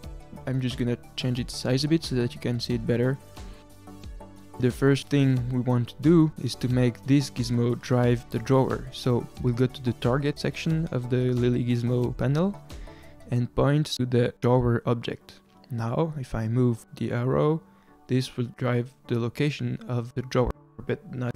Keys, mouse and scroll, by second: 1.1-5.9 drag, 9.0 click, 9.9-10.4 scroll down 1, 13.2 click, 17.0 click.